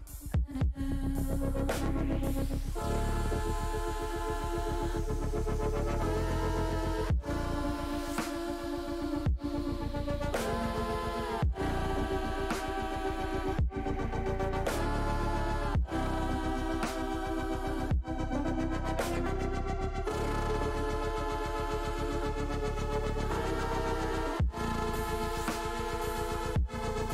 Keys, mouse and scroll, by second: 1.0-2.7 drag, 4.3 click, 5.0-6.3 middle drag, 7.1 middle click, 7.6 middle click, 8.8 click, 9.5-11.8 drag, 12.2 middle click, 13.6 ctrl+z, 14.0 middle click, 15.5 g, 15.6 g, 17.1 click, 17.5 middle click, 19.8 click, 20.9 middle click, 26.1 click, 26.7 middle click.